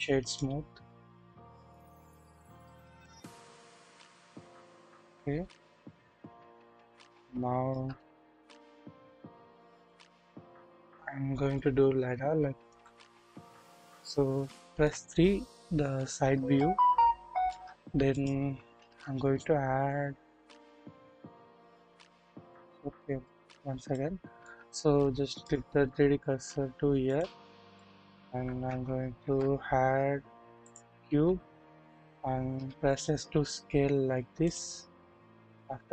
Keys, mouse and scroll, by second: 1.1-3.2 drag, 3.4-3.9 scroll down 1, 4.3-4.8 scroll up 1, 4.8 KP_1, 6.2 middle click, 6.2-6.9 scroll up 1, 7.1 KP_1, 7.3-7.8 shift+middle drag, 7.9 scroll up 1, 8.6 scroll down 1, 12.7 KP_1, 13.2 scroll down 1, 13.7 middle click, 14.7 KP_3, 16.5-17.6 shift+middle drag, 18.1 shift+click, 18.8 shift+a, 20.8-21.5 scroll up 1, 21.6 scroll down 1, 22.3 KP_1, 23.9-24.5 shift+middle drag, 25.5 middle click, 27.0 middle click, 27.7-28.1 shift+middle drag, 29.1 shift+a, 32.5 typing, 35.5 click.